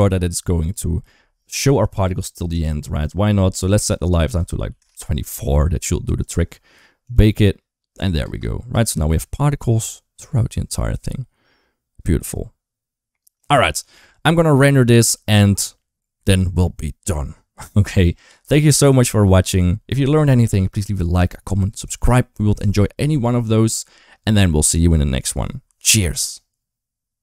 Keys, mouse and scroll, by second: 0.5 click, 2.4 click, 3.6 click, 6.9 click, 8.1 space, 8.5 space, 9.4-13.2 drag, 13.4 ctrl+s.